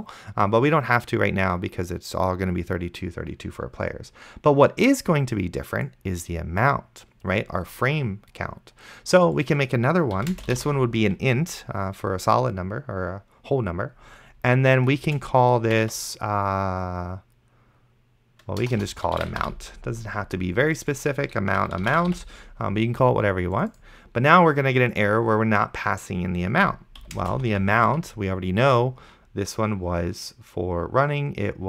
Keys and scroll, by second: 10.3-11.2 typing, 15.3 space, 15.7 f, 18.6-20.0 typing, 21.1-22.8 typing, 27.2 space, 27.4 1.